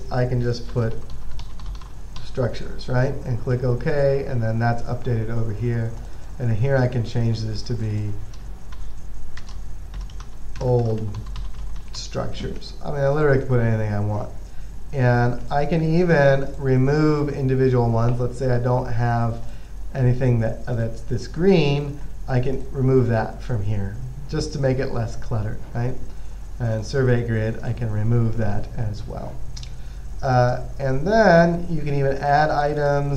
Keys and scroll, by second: 0.8-2.9 typing, 9.0-12.7 typing.